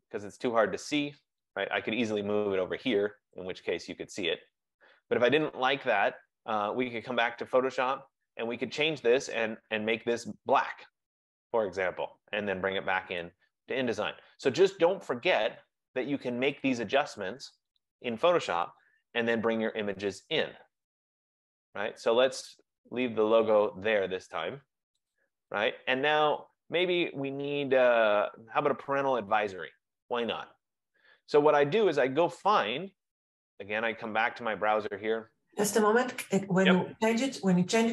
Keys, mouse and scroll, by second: 3.0 F15, 3.4 click, 7.5 click, 13.7 click, 16.7 click, 18.8 BackSpace, 23.4 click, 25.2 click, 34.3 click, 35.8 click.